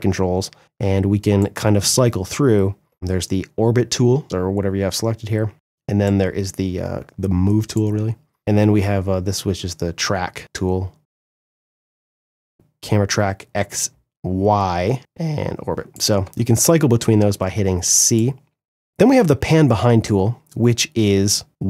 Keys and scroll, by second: 5.5 c, 7.5 c, 15.7 c.